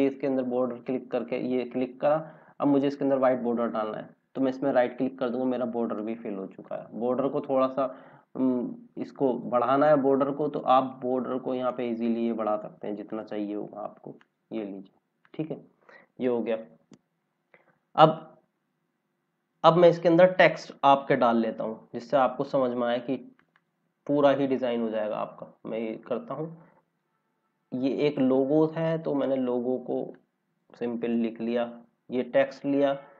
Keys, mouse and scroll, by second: 4.3 right click, 9.2 click, 16.0 scroll down 1, 22.4 click, 25.7 click, 31.0 ctrl+c.